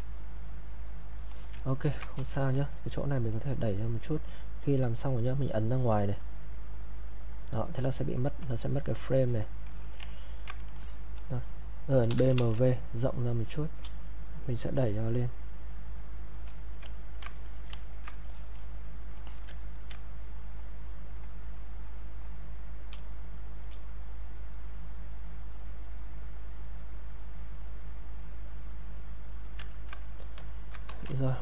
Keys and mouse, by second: 1.3 alt+click, 1.7 ctrl+right click, 2.2 q, 2.5 alt+click, 3.3 click, 6.9 click, 9.4 click, 9.8 alt+click, 10.1 ctrl+right click, 10.8 alt+click, 11.8-12.6 typing, 14.3 space, 14.4 click, 16.9 ctrl+right click, 17.5 alt+click, 17.8 ctrl+right click, 18.4 ctrl+alt+click, 18.6 alt+click, 19.3 alt+click, 19.6 ctrl+right click, 20.8 ctrl+click, 22.9 ctrl+space, 24.0 ctrl+click, 25.0-26.4 ctrl+drag, 26.4 ctrl+click, 27.4-29.8 ctrl+drag, 29.8 ctrl+right click, 30.5 ctrl+click, 30.8 click.